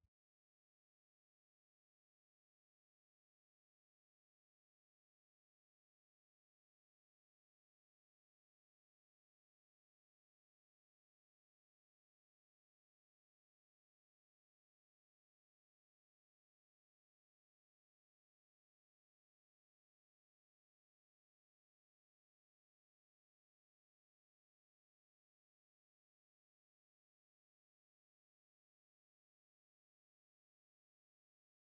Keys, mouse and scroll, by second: 3.2 middle click, 5.7 ctrl+z, 8.7 g, 23.6 middle click, 26.2 ctrl+z, 26.6 scroll down 1, 26.7 middle click, 30.6 Tab.